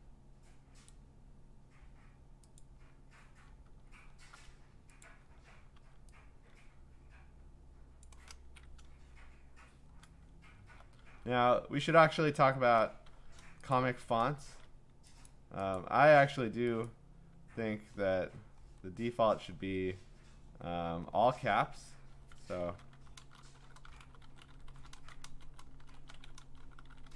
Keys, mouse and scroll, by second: 0.9 click, 2.6 click, 3.8 scroll, 5.0 click, 5.8 v, 8.0 click, 11.0 t, 11.6-12.4 scroll, 13.7-14.6 click, 13.7-14.5 scroll, 14.5 ctrl+a, 15.3 click, 15.7 click, 16.8 click, 17.8-19.9 scroll, 20.2-20.9 scroll, 21.7 Escape, 22.4-24.7 typing.